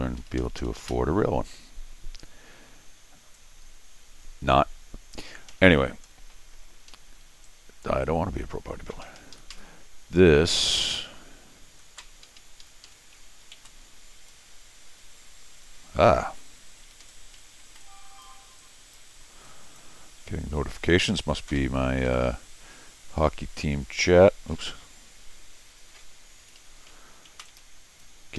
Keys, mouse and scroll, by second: 0.2 Escape, 0.4 Escape, 0.6 Escape, 3.3-5.1 drag, 5.5 Escape, 6.1 scroll down 2, 6.9 Escape, 7.4 click, 9.0 Escape, 9.2 Escape, 9.3 Escape, 9.5 Escape, 12.2 Escape, 12.4 Escape, 12.6 Escape, 12.8 Escape, 13.6 t, 16.2 ctrl+z, 16.8 Escape, 17.0 Escape, 17.0 scroll up 4, 17.7 t, 17.8 click, 18.6 click, 19.4 click, 21.6 Escape, 22.0 Escape, 24.5 ctrl+z, 25.9 ctrl+z, 26.4 Escape, 26.6 Escape, 27.3 t, 27.4 click.